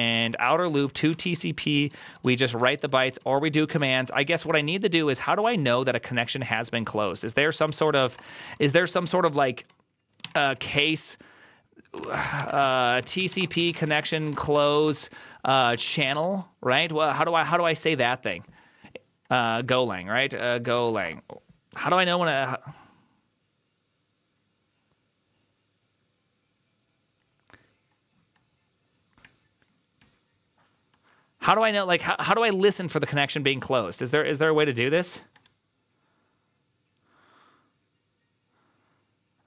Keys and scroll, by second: 0.0-10.6 typing, 7.5 ctrl+c, 7.6 ctrl+c, 11.8-17.4 typing, 20.8 typing.